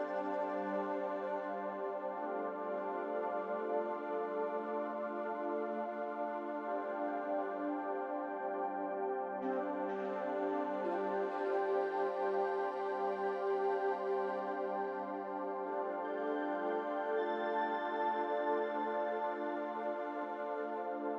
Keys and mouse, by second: 0.4-1.1 drag, 1.9 middle click, 3.3-3.9 drag, 6.0-6.7 shift+drag, 8.0 r, 9.8 a, 10.9 s, 12.6 r, 16.2 middle click, 17.8 Tab, 19.8-21.1 middle drag.